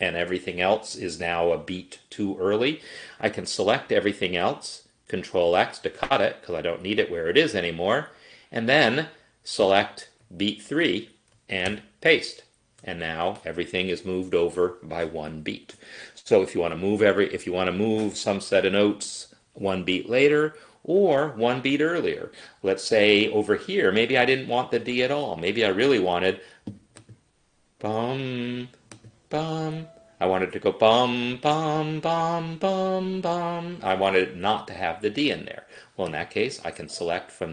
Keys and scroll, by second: 5.4 ctrl+x, 11.8 ctrl+v.